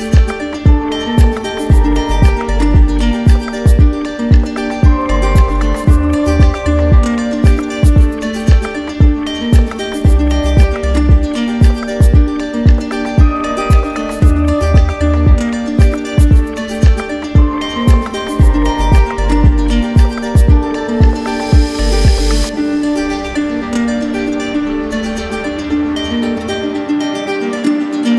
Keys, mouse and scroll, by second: 1.2 shift+click, 2.7 shift+click, 4.0 shift+click, 4.7 shift+click, 5.3 shift+click, 6.4 click, 7.0 shift+click, 8.7 shift+click, 9.9 click, 10.7 right click, 11.6 click, 14.4 shift+click, 17.7 shift+click, 18.5 alt+click, 20.6 shift+click, 22.0 shift+click, 23.5 shift+click, 24.1 shift+click, 24.9 shift+click, 25.6 click, 25.9 click, 26.0 shift+click, 26.1 alt+click, 26.3 shift+click, 26.4 alt+click, 26.4 ctrl+shift+z, 26.4 click, 26.6 shift+click, 26.6 right click, 26.8 shift+click, 26.9 right click, 27.0 shift+click, 27.1 alt+right click, 27.1 right click, 27.3 shift+click, 27.4 shift+click, 27.5 shift+click, 27.5 right click, 27.5 right click, 27.6 alt+right click, 27.8 middle click, 27.9 click, 28.0 right click, 28.1 shift+click, 28.1 right click.